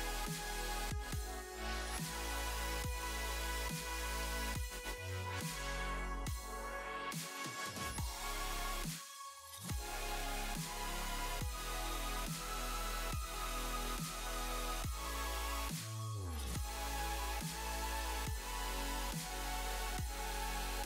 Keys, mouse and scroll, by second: 0.6 click, 1.8 click, 3.0 click, 3.5 click, 3.8 click, 3.9 space, 5.7 space, 6.4 click, 7.2 click, 7.9 space, 14.0 space, 14.5 click, 14.9 click, 15.7 click, 15.9 click, 16.5 scroll up 1, 16.6 space, 17.1 click, 19.4 middle click.